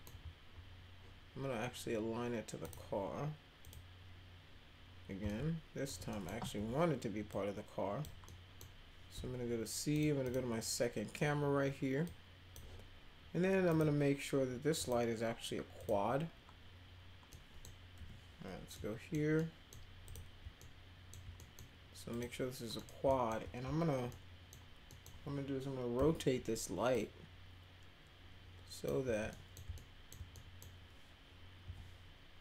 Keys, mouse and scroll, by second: 2.6 click, 3.6 click, 5.2 middle click, 5.2 z, 6.1 middle click, 7.3 click, 8.2 middle click, 9.1 c, 9.9 click, 10.2 click, 12.0 click, 13.7 click, 14.7 click, 15.8 click, 17.3 middle click, 17.9 p, 18.7 super+middle click, 19.3 middle click, 20.0 click, 20.6 alt+middle click, 21.4 middle click, 22.1 click, 22.8 middle click, 23.0 alt+middle click, 24.1 middle click, 24.9 middle click, 26.9-28.9 drag, 29.0 w, 29.3 middle click, 29.7 alt+middle click, 30.3 middle click, 31.6 e.